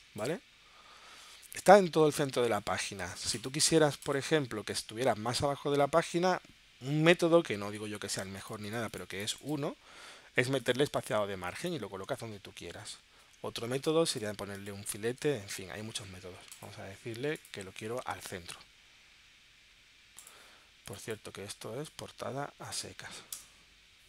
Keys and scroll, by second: 23.4 BackSpace.